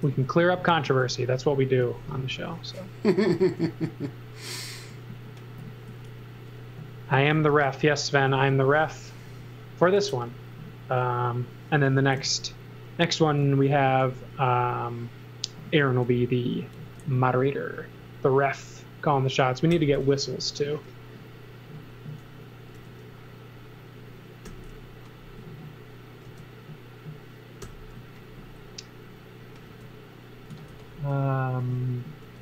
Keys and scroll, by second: 0.0-2.3 typing, 3.3 e, 6.2-9.2 typing, 11.7-14.8 typing, 16.8 space, 17.9 space, 19.7 n, 22.7 space, 23.7 space, 24.5 n, 26.2 space, 27.3 space, 27.6 n, 29.6-31.2 typing, 32.2 space.